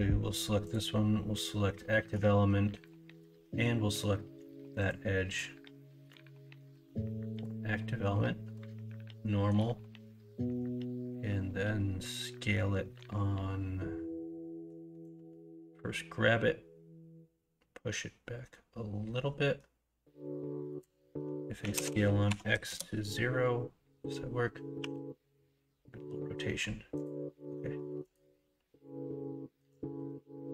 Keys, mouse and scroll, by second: 21.6 s, 24.7 r.